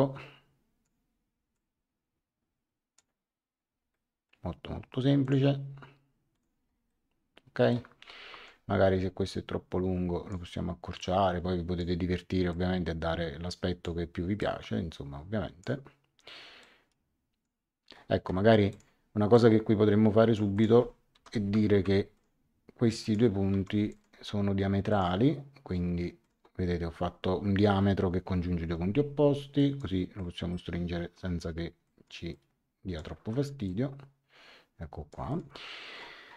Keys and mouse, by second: 1.5 click, 3.9 middle click, 5.2 click, 6.3 click, 6.8 middle click, 8.3 Escape, 9.2 click, 11.0 click, 12.5 click, 14.4 click, 16.6 click, 18.7 click, 20.5 click, 21.1 l, 21.7 x, 22.1 click, 23.5 Escape, 23.9 click, 26.2 click, 28.6 Escape, 29.5 click, 31.8 click, 33.2 Escape, 33.6 click, 35.3 click.